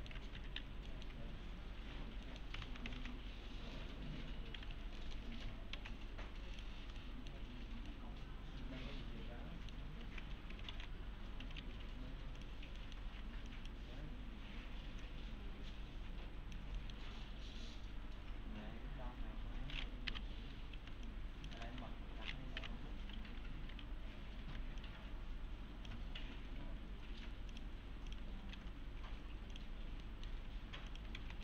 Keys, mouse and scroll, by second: 0.4 F3, 0.9 middle click, 1.9 1, 2.3 middle click, 2.6 ctrl+a, 3.0 alt+x, 4.7 F3, 5.0 middle click, 5.1 F3, 5.8 alt+x, 6.2-6.6 scroll down 1, 6.6 click, 7.0 alt+middle click, 7.8 alt+scroll down 1, 7.9-9.8 alt+middle click, 10.1 alt+q, 10.7 alt+x, 11.2-12.1 typing, 12.4 click, 12.8 middle click, 13.0 scroll down 1, 13.2 1, 13.5 click, 15.0-16.6 click, 16.8 middle click, 17.0 scroll down 1, 17.1 1, 20.8 s, 21.1-21.7 click, 21.5 s, 21.8 1, 23.7 1, 24.8-26.1 shift+click, 28.5 alt+q, 29.7 click, 30.0 middle click, 30.9 click, 31.2 alt+x.